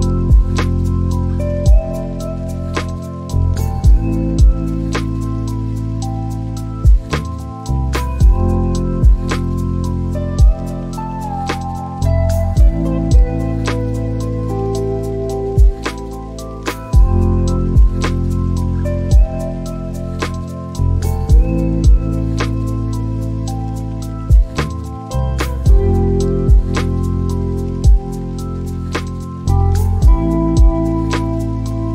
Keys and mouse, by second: 3.5 click, 8.5 click, 11.4 click, 17.4 click, 18.3 click, 21.7 click, 24.0 click, 25.2 click, 31.7 click.